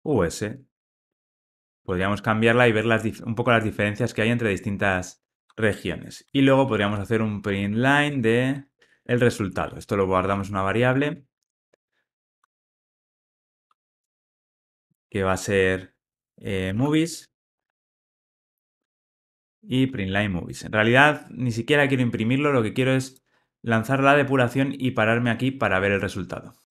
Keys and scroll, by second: 8.1 Return, 20.6 Return, 23.0 Return, 23.1 super+F8.